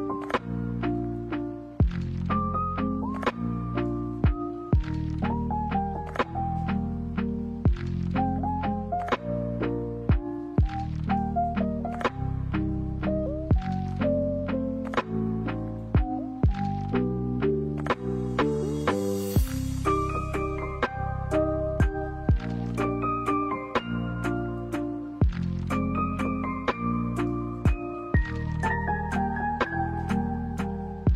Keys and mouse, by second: 9.2 middle click, 9.8 middle click, 12.1-13.1 middle drag, 13.8 click, 13.9 middle click, 15.8 alt+right click, 16.2 middle click, 16.6 g, 21.9 right click, 22.5 alt+right click, 22.9 middle click, 25.0 ctrl+b.